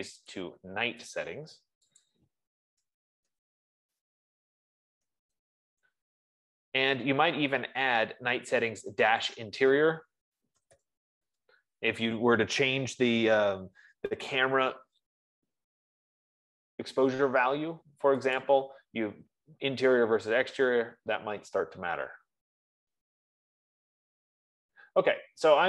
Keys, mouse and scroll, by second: 0.5 click, 0.7 click, 1.6 click, 2.5 click, 3.4-6.8 typing, 9.7 click, 10.5-12.2 typing, 15.9 F15, 19.1 click, 20.7 click, 21.1-23.9 drag.